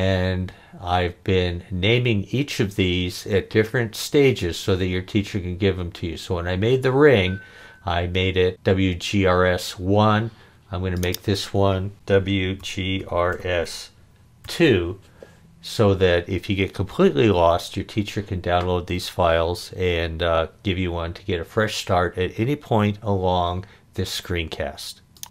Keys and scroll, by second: 11.9-14.5 typing.